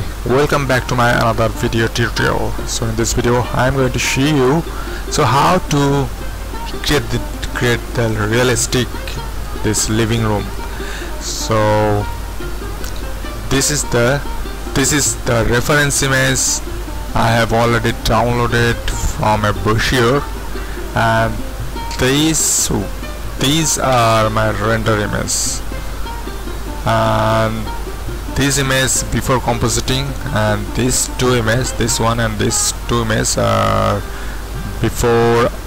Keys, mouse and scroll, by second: 6.3-13.1 middle drag, 13.1-13.7 scroll up 1, 13.7-31.2 middle drag, 31.2 click, 32.2-35.6 middle drag.